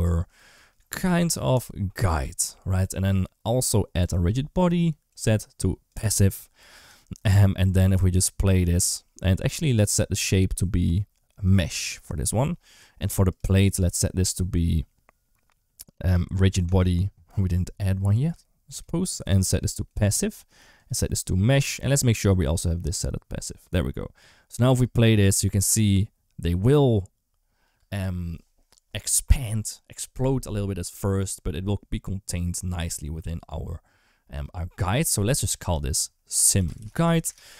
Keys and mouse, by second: 0.2 shift+middle click, 3.9 click, 5.0 click, 10.0-11.4 drag, 16.6 click, 18.7-19.8 drag, 20.7 click, 22.2 click, 24.6 space, 27.6 space, 34.2 click, 35.1 F2.